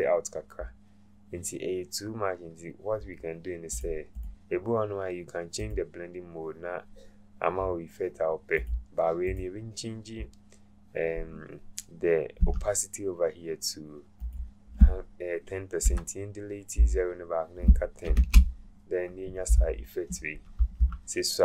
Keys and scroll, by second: 15.8 BackSpace, 18.1 Return.